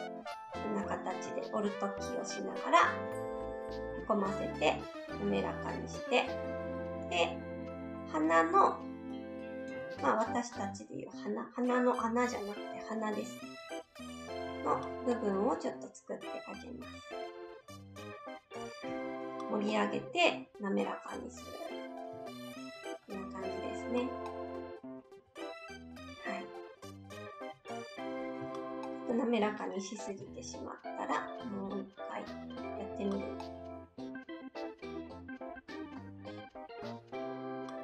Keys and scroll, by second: 18.8 shift+s, 28.4 s, 32.9 alt+s.